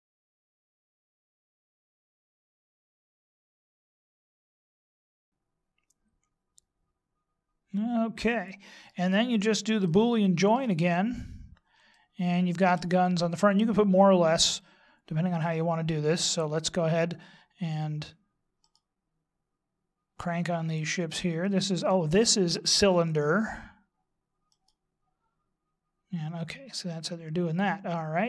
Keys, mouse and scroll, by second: 0.0 click, 2.2 right click, 2.5 click, 4.4-5.1 scroll down 8, 4.5 middle click, 4.8 middle click, 5.2 middle click, 9.9 shift+middle click, 10.9-11.9 scroll up 4, 11.9 shift+middle click, 19.6 right click, 25.5 right click.